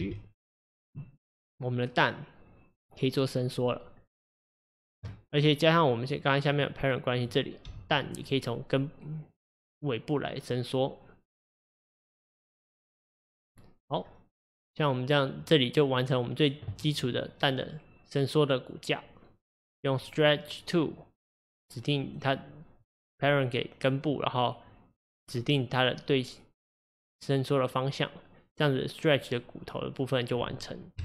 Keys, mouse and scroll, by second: 0.0 g, 6.1 click, 6.5 click, 7.7 g, 20.3 click, 22.1 click, 22.9 click, 25.0 click.